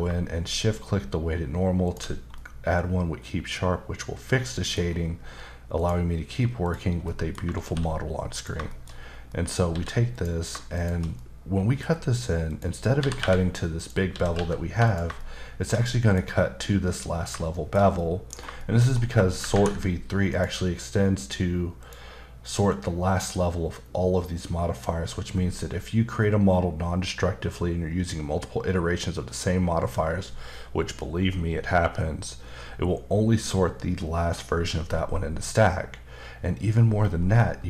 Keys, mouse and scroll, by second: 1.8 shift+click, 2.3 middle click, 4.5 middle click, 4.8-5.8 scroll up 1, 5.8 click, 6.6 click, 7.0 middle click, 7.6 shift+d, 8.3 click, 8.7 shift+middle click, 9.0-9.3 scroll up 2, 9.3 middle click, 9.7 s, 10.1 click, 10.8 shift+click, 11.2 middle click, 12.5 click, 13.0-14.3 typing, 13.8 click, 14.8 click, 15.2 shift+middle click, 16.2-16.7 scroll up 2, 17.5 middle click, 18.4-19.4 scroll up 2, 18.6 middle click, 20.3 click, 21.8 click.